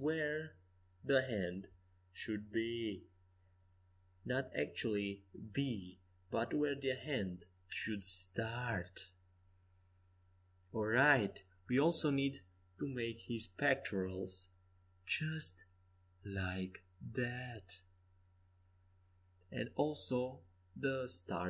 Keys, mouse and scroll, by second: 0.1 b, 2.4 Escape, 2.9 a, 3.7 c, 5.9 g, 8.4 a, 9.3 middle click, 12.2 c, 15.2 g, 17.8 a, 19.1 c.